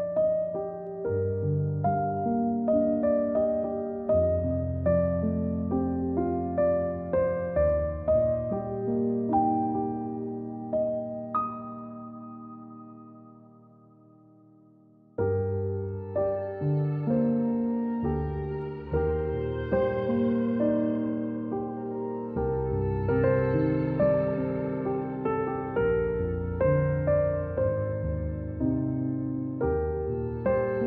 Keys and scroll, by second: 0.9 a, 3.3-4.9 typing, 8.0 ctrl+z, 9.8 a, 13.6-14.2 typing, 16.4 a, 19.9-20.4 typing, 20.0 Delete, 22.1 ctrl+v.